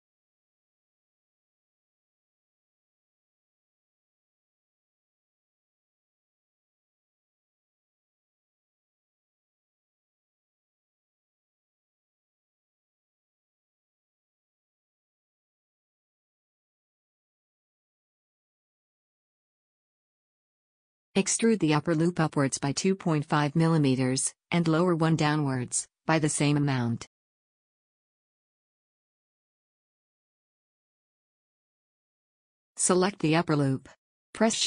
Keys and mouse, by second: 1.1 a, 3.2 f, 3.4 a, 6.4 f, 6.6 a, 8.8 f, 9.0 a, 12.6 f, 12.9 a, 18.0 b, 19.2-20.7 drag, 20.7 f, 21.0 a, 24.5 middle click, 24.5 click, 25.6 e, 27.6 a, 29.7 e, 33.6 a, 34.4-34.6 drag.